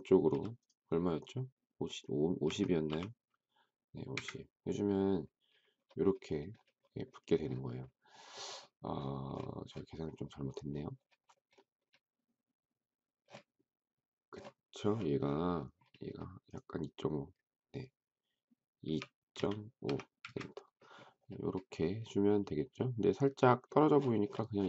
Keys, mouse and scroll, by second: 0.3 m, 2.3-2.7 typing, 4.1 Return, 18.6-19.6 typing, 20.1 Return.